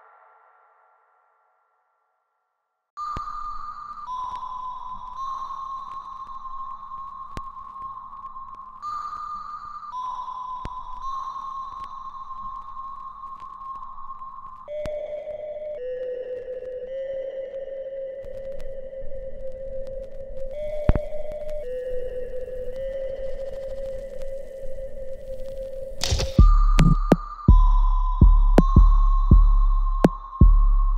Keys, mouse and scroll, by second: 10.2-10.7 scroll down 1, 10.7 right click, 11.6-15.4 alt+drag, 15.4 alt+middle click, 15.8 alt+right click, 16.4 alt+middle click, 17.0 alt+click, 17.9 ctrl+s, 18.5 right click, 19.6 click, 19.7 click, 20.7-22.9 shift+right drag, 22.9-26.8 drag, 26.8 alt+right click, 27.2-28.6 alt+drag, 30.0-30.9 alt+drag.